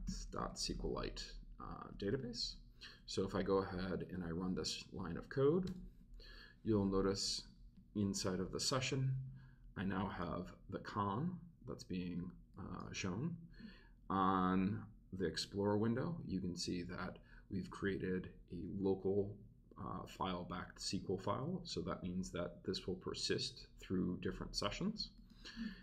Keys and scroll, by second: 0.0-1.2 typing, 2.3 Right, 2.9 Right.